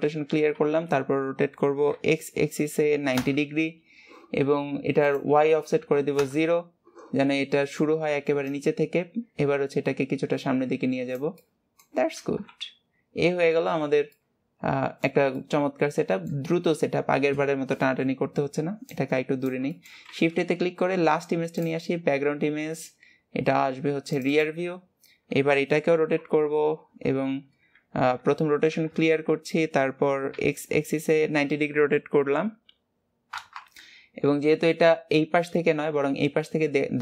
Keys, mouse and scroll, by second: 7.5-8.6 middle drag, 8.6-11.6 drag, 11.6 middle click, 12.5 KP_1, 13.4 scroll up 2, 14.1 scroll down 1, 14.3-18.5 middle drag, 19.9 middle click, 20.3 shift+a, 25.0 scroll down 2, 26.1 alt+r, 34.7-37.0 middle drag.